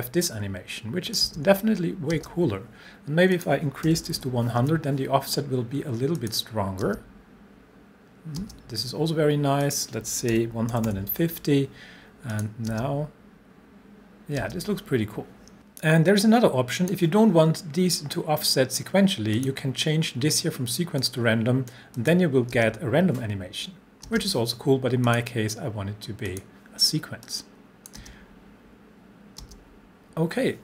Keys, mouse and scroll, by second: 0.2-1.2 click, 1.2 space, 3.3 click, 3.6-4.7 typing, 6.2 click, 6.8 space, 9.6 click, 9.7-11.2 typing, 12.4 click, 12.7 space, 15.5-17.1 drag, 19.4 click, 22.5 space, 25.1 click, 28.0 space.